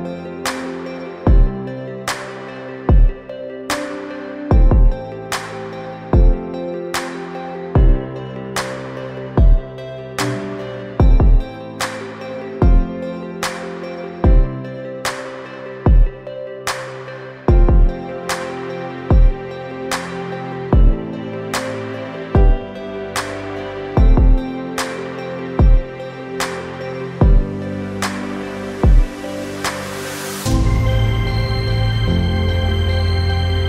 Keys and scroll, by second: 14.9-15.9 typing, 16.5 Return, 26.2 3, 26.7 0, 27.1 Return.